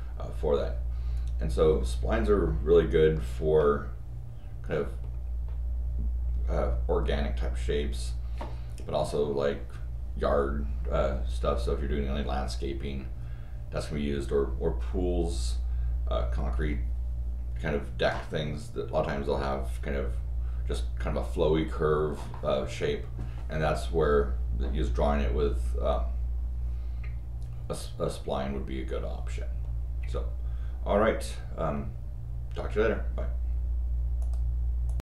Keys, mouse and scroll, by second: 34.2 click, 34.8 click.